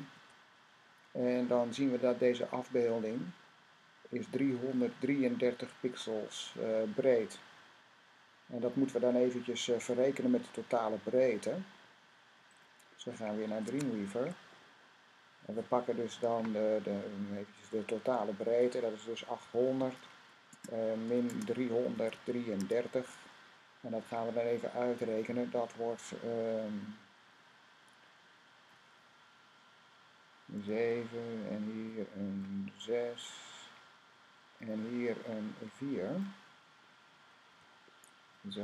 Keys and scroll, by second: 0.0 super+i, 13.5 Tab, 19.3-19.8 typing, 21.0-22.4 typing, 24.3-25.3 typing, 30.4 7, 34.8 typing, 37.4 4.